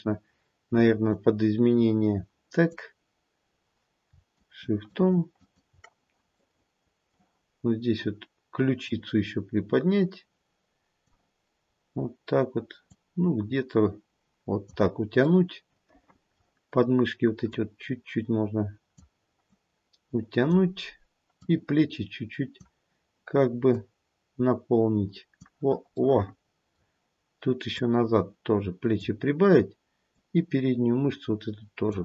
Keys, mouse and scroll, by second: 1.1 click, 4.3 shift+click, 5.6 shift+click, 8.8 click, 12.8 click, 15.7 middle click, 17.4 click, 19.4 click, 21.3 click, 23.7 click, 25.9 middle click, 27.7 click, 30.1 click.